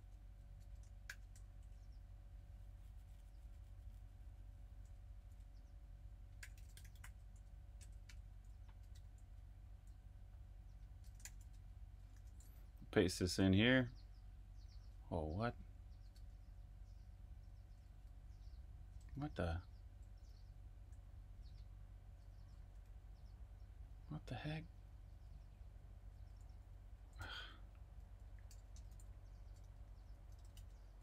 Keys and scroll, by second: 0.0-1.0 typing, 1.6 super+', 4.9-9.6 typing, 11.1-13.1 typing, 13.5 super+v, 14.6-16.7 typing, 17.9 o, 18.1 super+v, 18.9 super+v, 19.1 u, 20.2 Escape, 22.1 Escape, 22.6 o, 23.1 super+v, 24.4-31.0 typing.